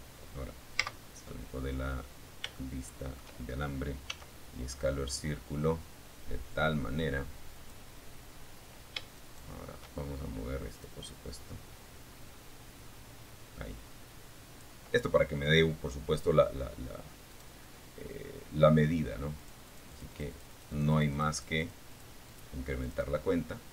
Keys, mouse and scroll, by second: 0.2-0.6 scroll down 1, 0.7 shift+middle click, 2.3 s, 5.7 click, 7.3 shift+right click, 9.0-10.8 drag, 10.8-13.0 right drag, 15.5 right click, 17.5-20.0 drag, 20.2 click, 20.5 click, 21.0 click.